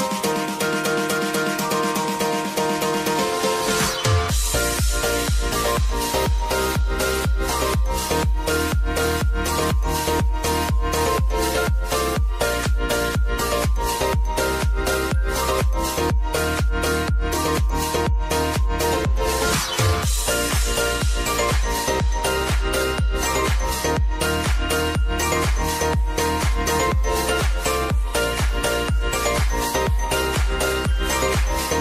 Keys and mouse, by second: 0.3-2.0 drag, 2.0 ctrl+c, 2.5-3.4 typing, 3.6 ctrl+v, 5.2 click, 6.0 k, 7.9 click, 9.8 space, 14.0 space, 15.6-17.9 drag, 17.9 space, 22.5-26.4 drag, 26.4 r, 27.1 click, 27.8 u, 29.1 click, 29.7 k.